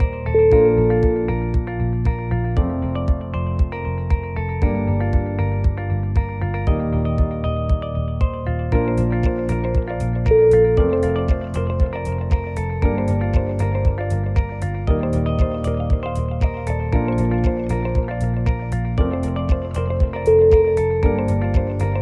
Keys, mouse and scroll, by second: 0.5 scroll up 1, 1.9 click, 2.3 alt+click, 2.4 alt+click, 2.9 alt+click, 3.0 middle click, 3.7 middle click, 4.6 alt+shift+click, 4.9 middle click, 5.4 g, 6.8 middle click, 7.2-7.7 scroll down 9, 7.7 shift+middle click, 9.3 scroll up 1, 9.6 middle click, 10.3 shift+z, 10.8 KP_1, 11.3 scroll up 4, 12.0 shift+middle click, 12.0 scroll up 2, 13.0-13.5 scroll down 6, 13.6 shift+middle click, 14.0 shift+a, 15.0 click, 15.3 click, 17.0 click, 17.4 r, 18.7 g, 19.9 scroll up 2, 20.1 shift+middle click, 20.6 s, 21.8 g.